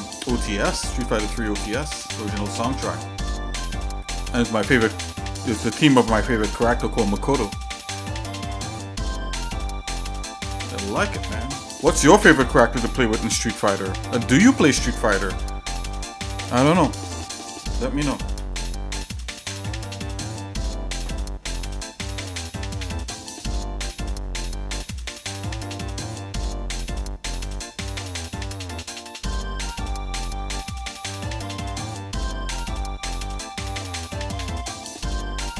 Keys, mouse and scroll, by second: 0.8 scroll up 1, 1.9 shift+middle click, 2.6-3.3 scroll down 2, 3.5 shift+middle click, 5.3 shift+middle click, 9.6 shift+middle click, 10.4 shift+click, 17.9 shift+middle click, 19.8 ctrl+j, 23.4 shift+middle click, 25.0 shift+middle click, 25.8 shift+middle click, 26.2 shift+middle click, 26.7 shift+middle click, 28.0 middle click, 28.6 shift+middle click, 31.8 shift+middle click, 32.9 right click, 34.4 shift+middle click.